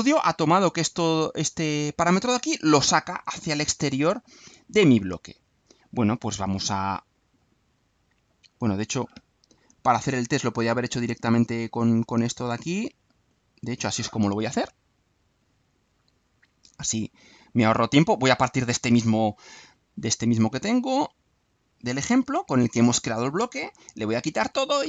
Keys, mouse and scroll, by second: 3.4 click, 13.2 click, 15.4-16.6 drag, 17.0 click, 17.4 click, 21.0-22.5 drag, 22.8 Delete, 23.6-24.5 drag.